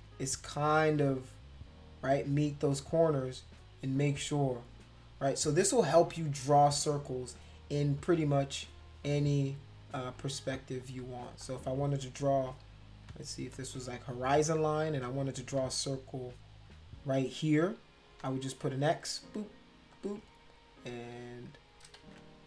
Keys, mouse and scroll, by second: 8.0 click, 8.6 shift+click, 9.4 click, 10.0 shift+click, 10.8 click, 11.4 shift+click, 12.9 click, 13.5 shift+click, 15.4 click, 15.9 shift+click, 16.7 shift+click, 17.2 shift+click, 18.0 click, 18.6 shift+click, 19.2 click, 19.9 shift+click, 20.7 click, 22.0 ctrl+z, 22.3-22.4 drag.